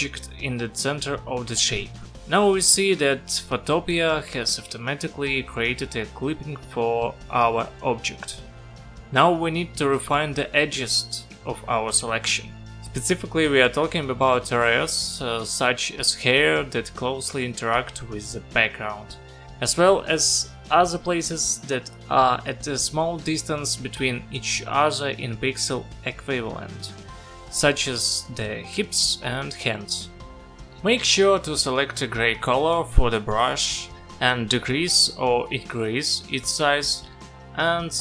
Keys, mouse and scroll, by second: 26.2 click, 27.7 click, 32.8 click, 35.5 click, 37.1 click.